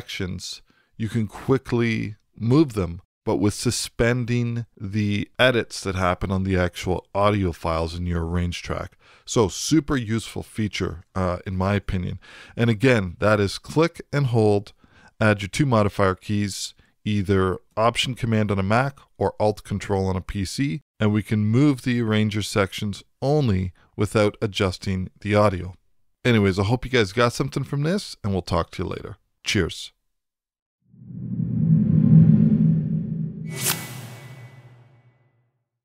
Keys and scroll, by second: 11.6 w.